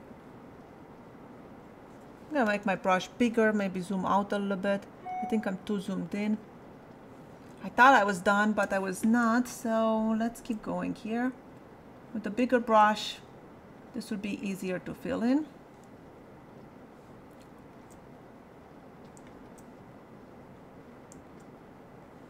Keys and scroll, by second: 2.5 ], 7.5 space.